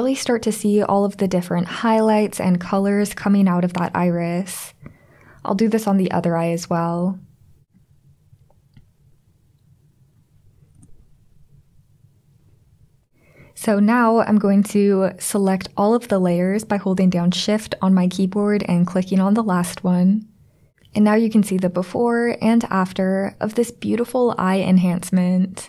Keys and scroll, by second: 10.8 super+0.